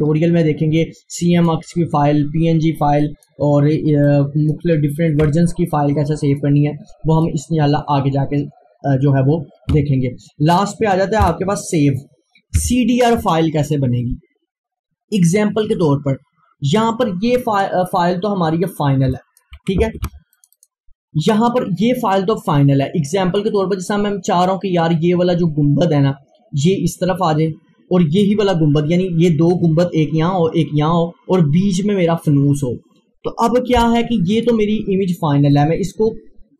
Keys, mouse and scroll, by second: 0.2-0.6 scroll down 1, 0.7 scroll up 1, 1.2 click, 2.1 scroll down 1, 3.1 click, 4.4-9.6 drag, 9.8 click, 11.3 p, 12.6 F4, 16.8 click, 16.9 click, 19.2 click, 20.1 Delete, 20.4 click, 23.1 click, 34.4 click.